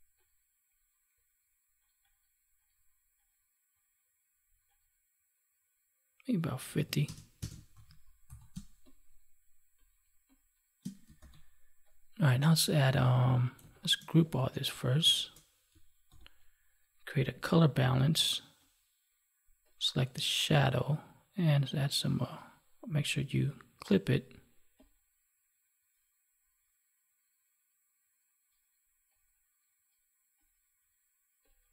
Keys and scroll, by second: 7.6 ctrl+s, 8.4 space, 11.1 ctrl+s, 16.0 ctrl+g.